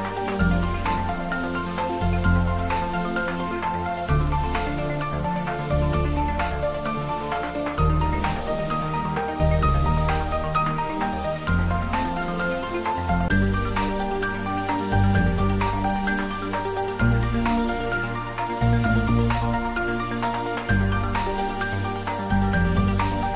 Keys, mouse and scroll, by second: 4.7-6.1 drag, 6.5 click, 6.7 scroll up 1, 7.3 scroll down 1, 7.4 scroll up 1, 8.0 scroll down 1, 9.8-10.1 scroll up 1, 10.1 click, 10.4 click, 11.1 click, 11.2 scroll down 1, 11.3 scroll up 1, 11.5 scroll down 1, 12.6 scroll down 1, 12.8-13.1 scroll up 1.